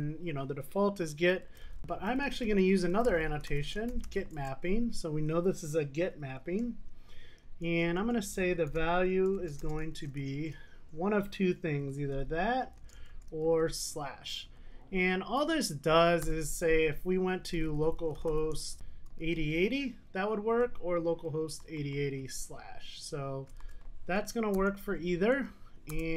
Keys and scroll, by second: 4.4 Return.